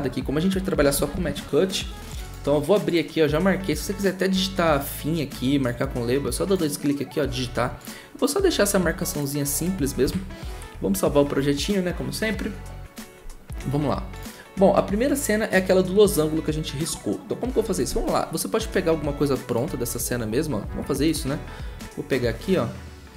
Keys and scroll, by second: 0.5-1.3 typing, 10.0 ctrl+s, 20.7 v.